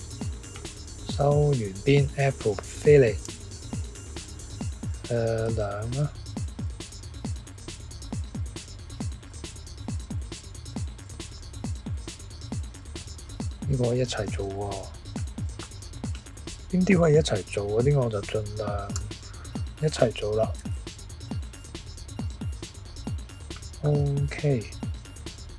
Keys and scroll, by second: 3.2 f, 5.5 2, 18.9 f, 20.6 2.